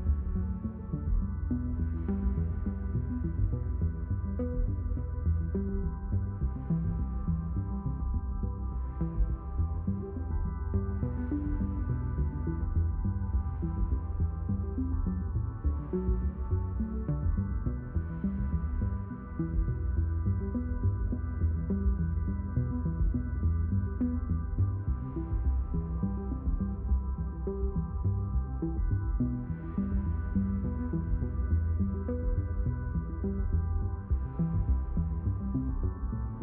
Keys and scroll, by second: 4.5 space, 14.8 space, 19.4 space.